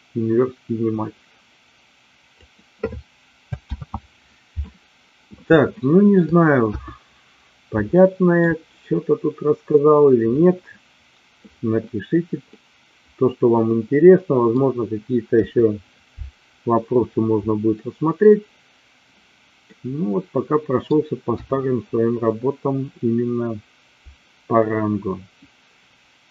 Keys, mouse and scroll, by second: 3.7 ctrl+z, 5.7 shift+middle click, 6.7 KP_1, 8.0 shift+middle click, 12.5-14.6 middle drag, 15.4 KP_1, 19.7-20.8 middle drag, 21.2 KP_1.